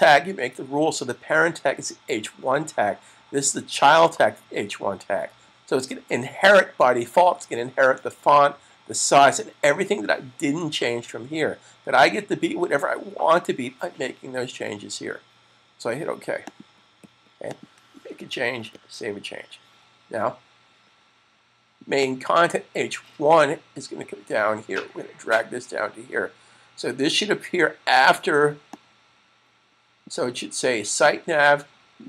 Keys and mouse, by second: 16.2 click, 18.6 super+s, 21.8 click, 28.6 click.